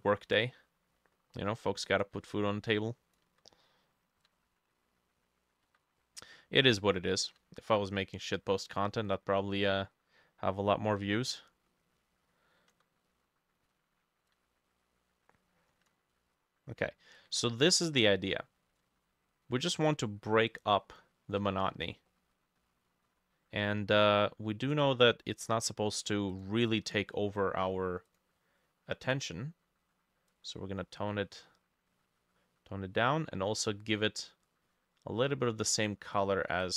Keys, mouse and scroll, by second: 5.0-6.0 ctrl+middle drag, 9.5 middle click, 10.5 middle click, 11.9-14.4 ctrl+drag, 11.9-13.1 ctrl+middle drag, 16.2 ctrl+middle click, 17.9-19.2 ctrl+middle drag, 20.0 ctrl+middle click, 21.8-22.1 scroll down 6, 22.1 middle click, 22.6 middle click, 22.9 scroll down 1, 23.1-23.5 scroll up 5, 23.6 middle click, 26.7 double click.